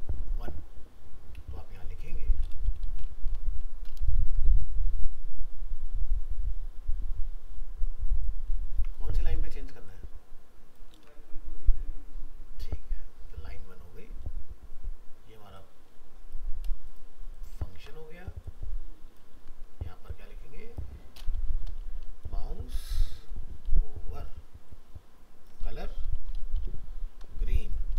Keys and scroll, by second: 3.2 ctrl+c, 4.2 ctrl+v, 9.2 ctrl+c, 10.9 ctrl+v, 17.7 ctrl+c, 19.3 ctrl+v.